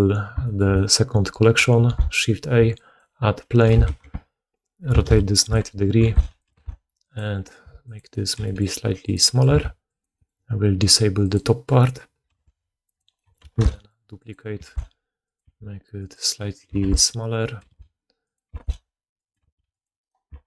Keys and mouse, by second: 1.7 shift+a, 3.5 r, 5.4-11.1 middle drag, 5.9 s, 6.4 g, 7.5 s, 8.2 g, 9.4 g, 11.1 click, 11.3-19.9 middle drag, 12.1 g, 13.4 shift+d, 14.5 s, 15.3 s, 16.6-20.2 typing, 19.9 right click, 20.0-20.4 middle drag.